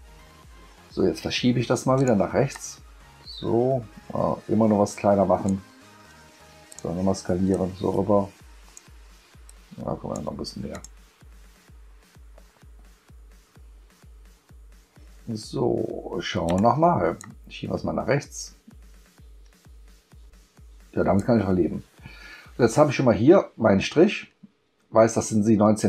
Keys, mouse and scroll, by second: 2.0 click, 2.5-5.4 drag, 6.7 click, 7.5-8.7 drag, 9.4 click, 10.7 click, 16.5 click, 17.2-21.2 drag.